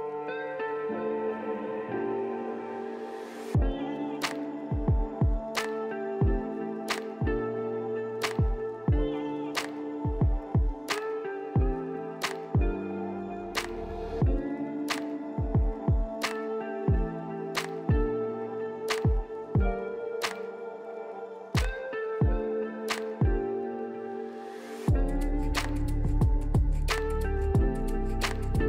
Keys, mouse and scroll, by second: 15.6 middle click, 17.6 Delete, 20.3 right click, 21.4 right click.